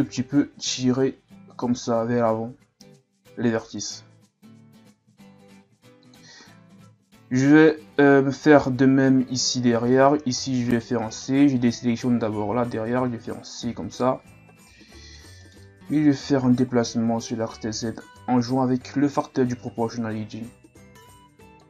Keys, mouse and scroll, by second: 0.3 g, 10.0 c, 11.1 right click, 12.8 c, 15.9 g.